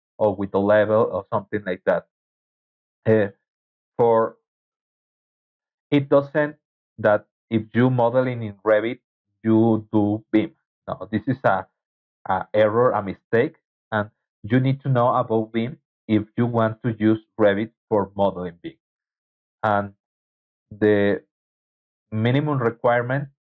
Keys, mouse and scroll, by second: 22.9 alt+Tab.